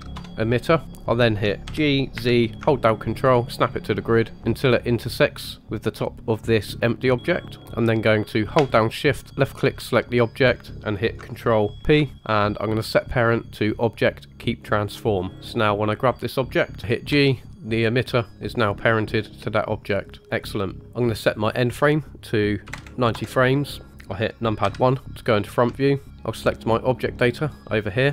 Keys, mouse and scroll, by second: 0.8-1.3 shift+middle drag, 0.8-1.3 scroll down 1, 1.6 g, 9.3 shift+click, 11.7 ctrl+p, 15.3 click, 17.1 g, 20.8-21.5 scroll down 2, 21.5-23.1 drag, 24.6 KP_1, 25.8 shift+middle drag, 26.3 click.